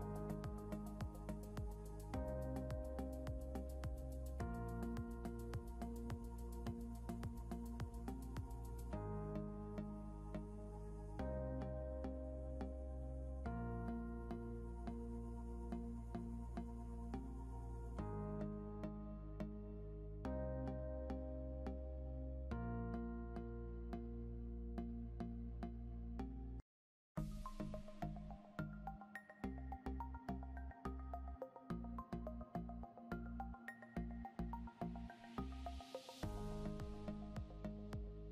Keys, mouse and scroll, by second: 4.7 click, 8.8-9.4 scroll down 2, 10.2 click, 10.6 scroll up 1, 11.1 click, 13.8 click, 15.4 click, 18.0 click, 20.3 click, 22.0 scroll down 1, 22.9 click, 24.1 scroll up 1, 25.0 click, 29.6 click, 30.3 scroll down 1, 32.3 scroll up 1, 33.2 click.